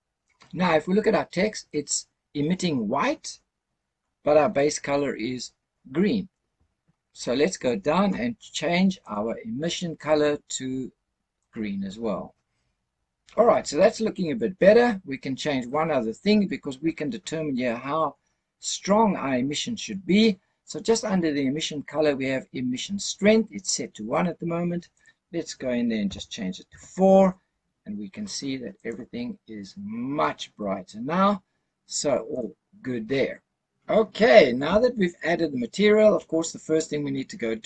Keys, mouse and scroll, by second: 3.9-4.7 scroll up 3, 4.7-6.4 scroll up 2, 6.8-7.8 scroll down 3, 8.9 click, 24.8-26.6 drag, 28.7 click, 32.2 click, 36.4-36.9 scroll up 5.